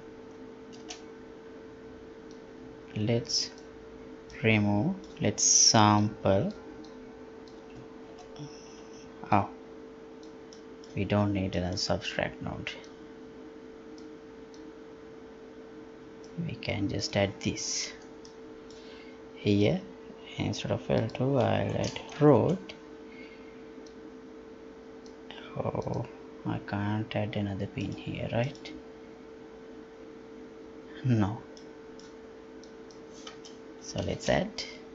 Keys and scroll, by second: 8.1 ctrl+w, 17.9 Delete.